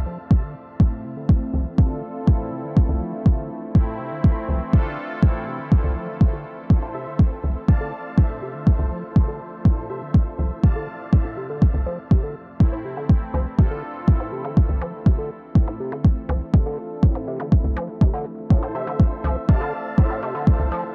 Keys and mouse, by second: 7.4-10.4 drag, 9.7 ctrl+z, 11.7 KP_1, 15.4-17.3 middle drag, 17.6-19.4 middle drag, 19.4-20.9 drag.